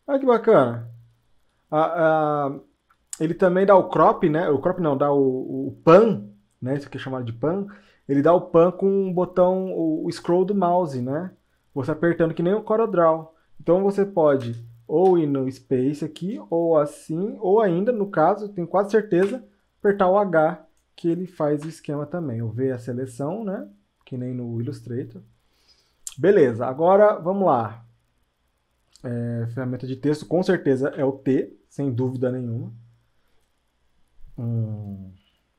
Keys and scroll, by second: 14.4 space, 19.2 h, 21.6 v.